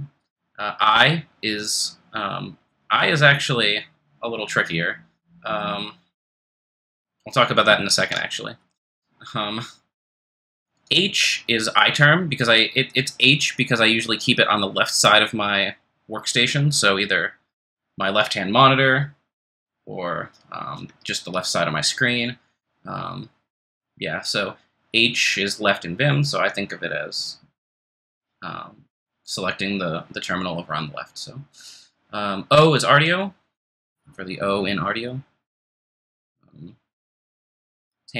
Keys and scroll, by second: 7.9 super+z.